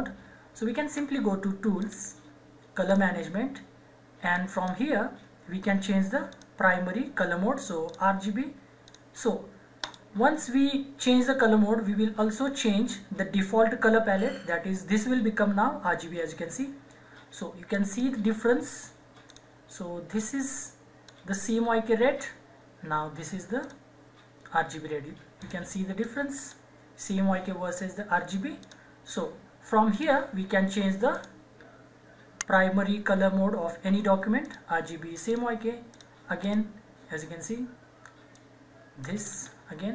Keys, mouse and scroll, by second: 1.7 click, 1.8 click, 17.6-23.4 drag, 23.6-28.6 drag, 34.4 click, 39.0 right click.